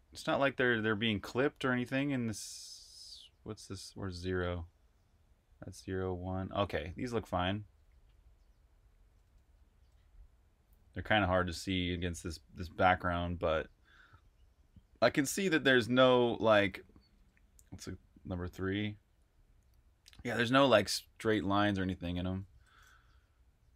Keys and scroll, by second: 21.4 super+q, 22.2 super+q.